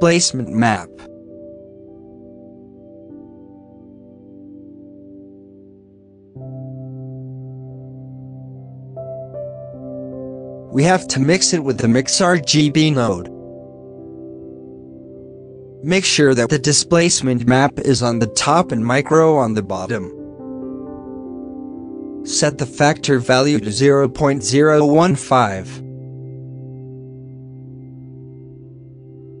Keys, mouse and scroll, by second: 0.0-0.4 drag, 0.4 scroll down 4, 0.9 middle click, 1.7 shift+d, 2.5 middle click, 2.7-3.1 scroll up 4, 4.7 click, 5.7 alt+a, 6.2-6.7 scroll down 7, 8.0 g, 8.1 alt+a, 8.3-8.6 middle drag, 8.6 shift+a, 12.5-14.0 drag, 14.0 ctrl+s, 14.9 g, 15.7 click, 16.0 g, 16.5 alt+a, 16.8-18.1 drag, 19.7-20.4 drag, 20.4 scroll up 5, 20.9-24.8 drag, 24.8-25.9 middle drag, 25.9-27.0 drag, 28.3-29.4 middle drag.